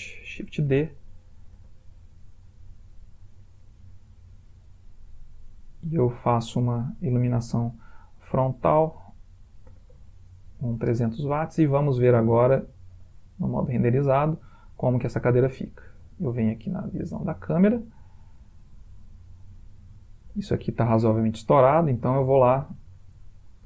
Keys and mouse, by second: 0.3 shift+d, 1.6 r, 5.2 click, 6.1-7.3 typing, 8.7 ctrl+click, 10.1 0, 11.5 middle click, 11.6 middle click, 11.7 middle click, 13.5 click, 14.6 middle click, 17.2 click, 18.3 ctrl+middle click, 21.8 click, 23.4 ctrl+click.